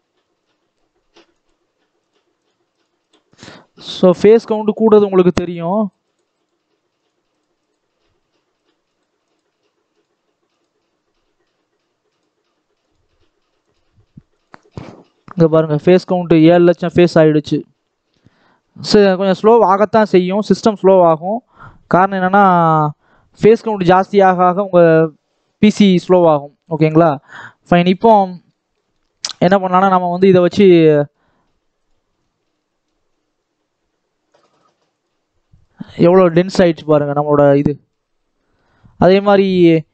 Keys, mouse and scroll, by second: 0.0-3.6 drag, 4.3 click, 5.7 click, 6.3-10.3 drag, 11.4-15.0 drag, 16.4-19.2 drag, 19.2 scroll down 2, 19.4-20.5 middle drag, 20.5-22.0 scroll up 1, 22.0-25.0 drag, 26.5 click, 26.8 ctrl+s, 27.3-29.0 middle drag, 29.0-29.4 scroll up 1, 29.4 scroll down 2, 29.6-30.6 middle drag, 30.6 scroll up 1, 30.8 shift+middle click, 31.8 click, 34.8 click, 35.4 click, 35.9 click, 36.3-36.6 scroll up 2, 36.6-38.0 shift+middle drag, 38.0 scroll up 1, 38.3-39.9 shift+middle drag.